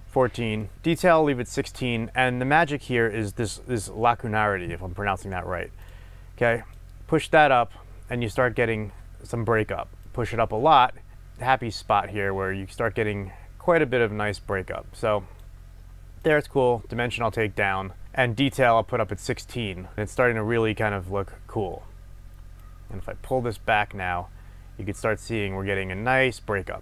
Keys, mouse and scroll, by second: 0.2-5.8 middle drag, 0.7 Tab, 5.8-8.8 drag, 10.0-26.8 drag, 18.0 Tab.